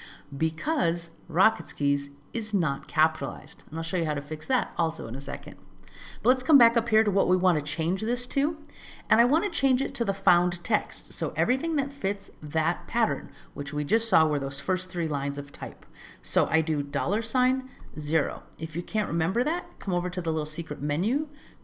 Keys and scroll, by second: 8.2 alt+z.